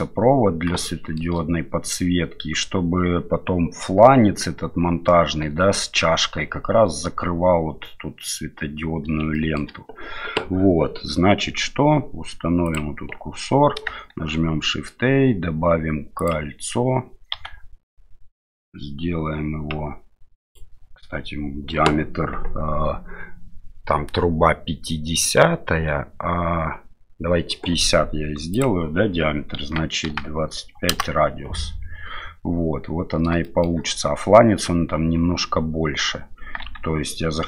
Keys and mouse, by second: 0.8 shift+middle click, 9.4 shift+middle drag, 14.1 shift+a, 17.3 s, 28.5-31.4 drag, 33.4 shift+drag, 36.6 Tab.